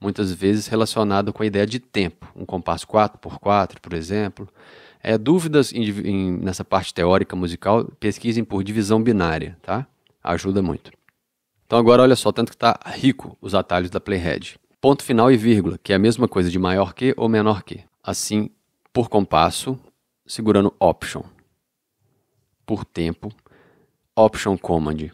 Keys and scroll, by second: 18.1 ., 22.0 alt+., 24.7 alt+super+..